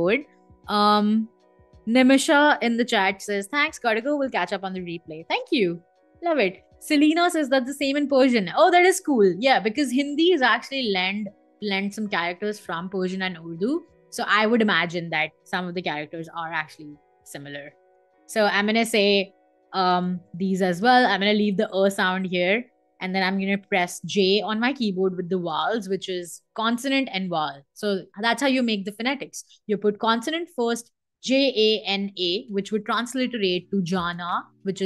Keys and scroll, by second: 8.4 space, 16.6-20.5 typing, 23.4 j, 24.0 a, 24.5 n, 24.9 a.